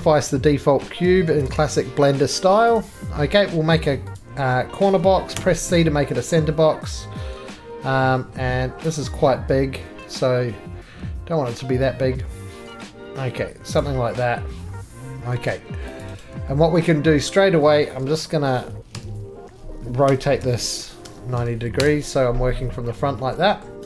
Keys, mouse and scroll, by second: 0.9 middle click, 1.3 alt+shift+z, 2.8 click, 4.2 click, 5.4 c, 8.6-12.8 scroll, 13.8 click, 16.0 click, 16.2 right click, 17.2 middle click, 17.3-17.9 scroll down 6, 17.9 middle click, 18.9-21.8 typing, 20.1 scroll, 23.0 middle click, 23.0-23.6 scroll down 6, 23.6 middle click.